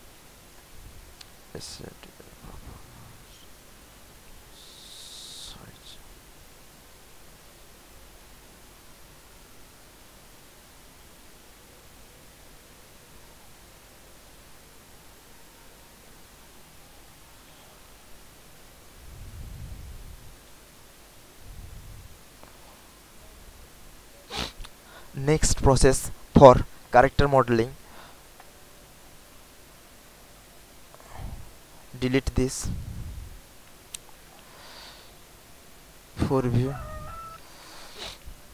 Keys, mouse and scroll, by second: 2.2 ctrl+click, 6.0 ctrl+click, 8.9 ctrl+click, 9.9 ctrl+click, 11.2 ctrl+click, 13.2 ctrl+click, 18.7 alt+click, 20.6-21.7 drag, 29.8 alt+click, 30.8 alt+click, 31.6 click, 32.3 Delete, 34.8 space, 36.2-38.5 drag.